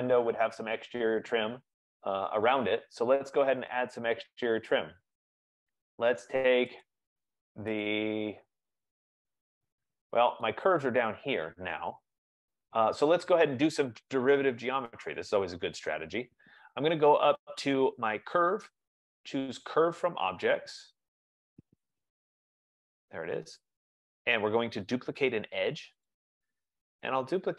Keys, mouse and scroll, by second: 4.6-5.7 scroll, 5.7-6.2 scroll, 7.2 click, 8.2 click, 9.7 scroll, 10.4-10.8 scroll, 10.8 click, 12.7 click, 12.8 F15, 14.3-14.8 scroll, 15.8 right click, 16.3-16.8 scroll, 18.6 middle click, 18.6 click, 21.7 click, 26.2 click.